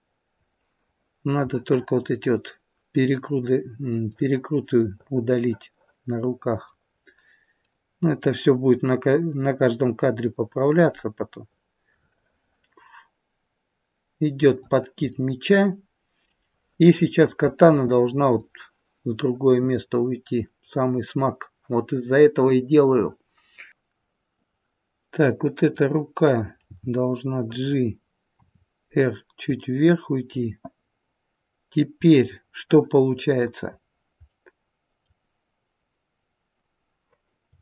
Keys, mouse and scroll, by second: 1.4 middle click, 2.3-2.7 scroll up 2, 4.0 middle click, 4.0-4.4 scroll up 2, 6.8-7.5 scroll down 3, 7.5 middle click, 10.0 click, 15.0 middle click, 24.3 click, 25.6 click, 26.6 g, 28.4 r, 32.0 middle click, 33.8-34.3 scroll up 2, 34.3 middle click.